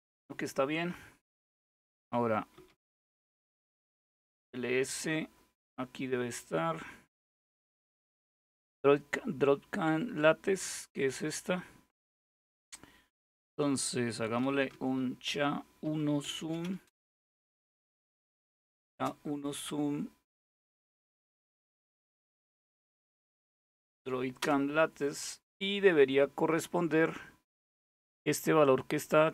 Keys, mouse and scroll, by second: 1.9-2.8 typing, 5.7-7.1 scroll up 2, 7.1-7.7 scroll down 2, 7.7-8.0 scroll down 1, 12.1 click, 12.6-14.0 scroll down 2, 13.8-18.8 typing, 21.9-22.8 typing, 23.0 Tab, 24.0 Return, 28.7-29.3 drag.